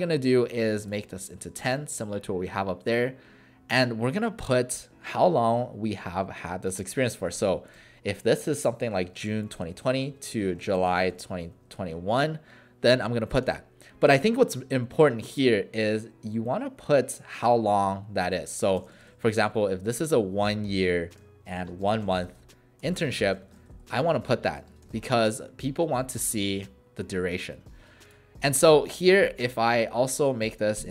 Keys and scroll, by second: 7.0-12.0 typing, 13.4 space, 15.8 shift+9, 17.4 1, 18.5-24.8 typing.